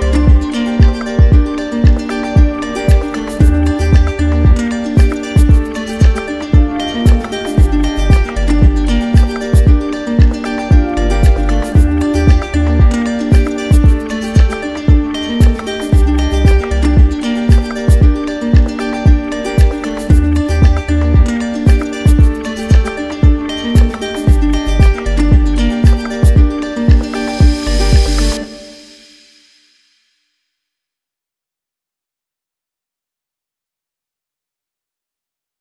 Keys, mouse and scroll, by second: 0.3 alt+right click, 0.8 right click, 1.7 right click, 2.7 z, 3.6 click, 4.3-5.3 right drag, 10.9 click, 12.0 right click, 13.7 right click, 13.8 ctrl+z, 20.8 right click, 22.0 click, 22.0 right click, 22.7 shift+click, 23.2 shift+click, 23.7 shift+click, 23.8 shift+click, 24.6 shift+click, 25.1 shift+click, 25.8 right click, 26.6 shift+click, 27.0 shift+click, 27.5 shift+click, 27.9 shift+click, 28.2 shift+click, 28.8 right click, 29.6 shift+click, 30.3 right click, 31.1 right click, 31.1 shift+click, 32.6 right click, 35.4 alt+click.